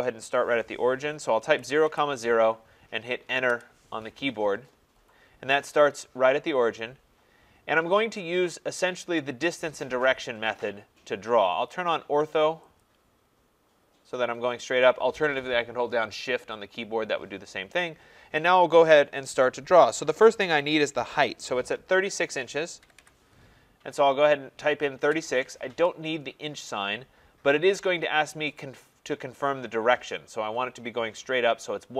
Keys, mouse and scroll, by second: 1.3-2.4 typing, 3.5 Return, 12.9 click, 22.6-23.5 typing, 25.1 Return, 26.4-26.7 scroll.